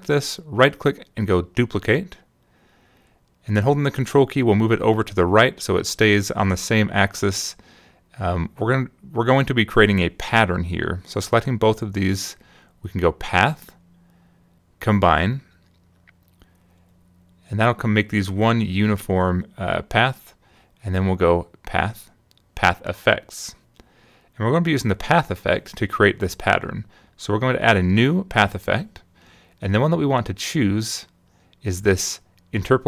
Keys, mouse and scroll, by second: 0.8 right click, 2.3 click, 4.6-9.0 ctrl+drag, 11.6 shift+click, 14.0 click, 17.2 click, 21.1 click, 23.2 click, 25.9 click, 29.1 click.